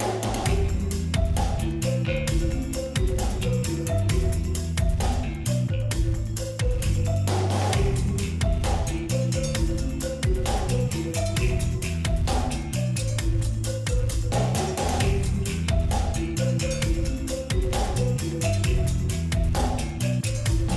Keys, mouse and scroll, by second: 0.3 Down, 1.9 Return, 4.4 click, 5.6 ctrl+2, 6.3 alt+scroll up 1, 7.1 alt+scroll up 1, 7.9 p, 8.7 alt+scroll up 1, 9.3-13.6 drag, 13.9 shift+x, 14.3 alt+scroll down 1, 15.7-20.7 drag.